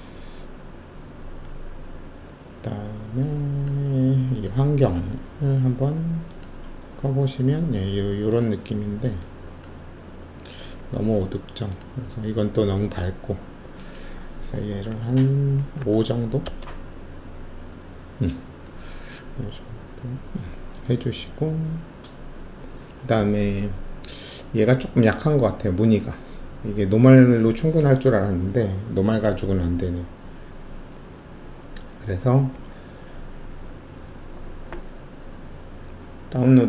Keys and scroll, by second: 15.7 5, 16.4 Return.